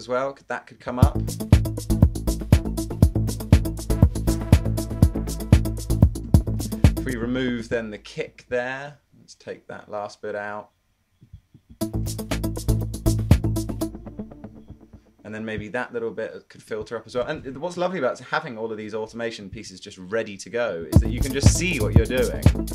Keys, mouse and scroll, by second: 1.1 space, 6.3 space, 7.0 space, 11.8 space, 12.3 super+1.